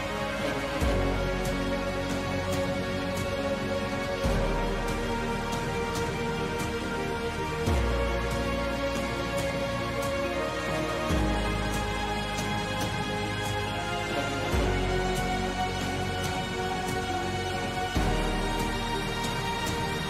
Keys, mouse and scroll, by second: 3.4 e, 6.4 g.